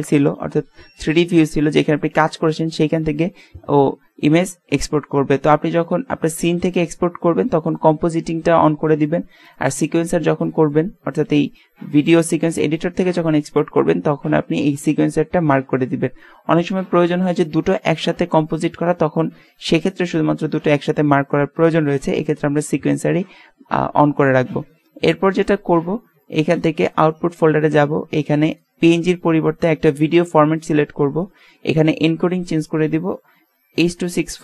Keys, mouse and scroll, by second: 9.4-18.7 drag, 26.8-30.4 drag, 31.7-33.6 drag.